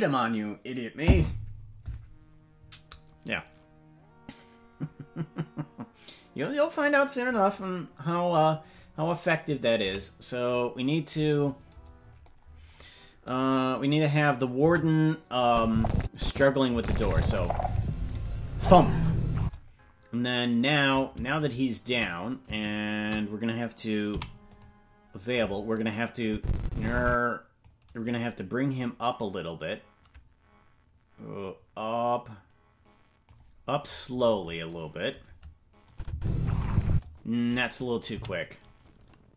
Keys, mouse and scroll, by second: 9.8 KP_Decimal, 12.0-13.0 scroll down 8, 14.6 KP_0, 15.4 click, 16.7 space, 19.3 space, 21.5 shift+right click, 24.1 shift+right click, 24.1 i, 26.2-27.6 drag, 28.8-33.3 drag, 33.9-34.7 scroll up 17, 35.9 click, 36.1 space, 36.9 space, 37.7 right click, 38.1 g.